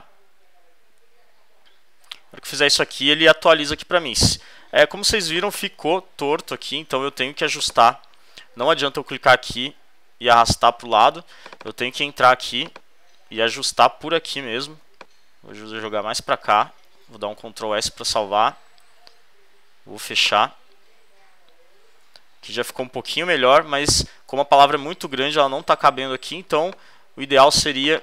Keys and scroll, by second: 9.3 v, 9.7 shift+Right, 14.3 v, 17.4 shift+super+s.